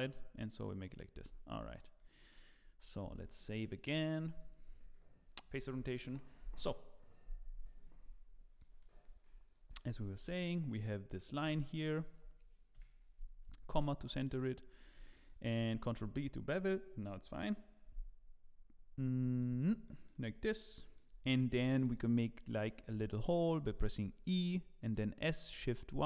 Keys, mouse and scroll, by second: 0.3 middle click, 1.2 Tab, 1.6 middle click, 1.9 middle click, 2.3 scroll up 2, 3.0 ctrl+s, 3.3 middle click, 5.0 click, 7.9-8.3 scroll up 9, 8.6 middle click, 9.0 shift+middle click, 9.4 click, 9.9 Tab, 10.2 scroll up 1, 11.4 2, 11.9 alt+click, 12.7 KP_Decimal, 13.5 scroll up 3, 13.8 middle click, 14.2 shift+middle click, 14.7 scroll up 1, 15.0 shift+middle click, 15.9 ctrl+b, 19.4 middle click, 19.8 shift+middle click, 20.4-20.7 scroll down 2, 20.7 shift+middle click, 21.2-21.6 scroll up 5, 21.6 shift+middle click, 22.9 e, 25.0 s.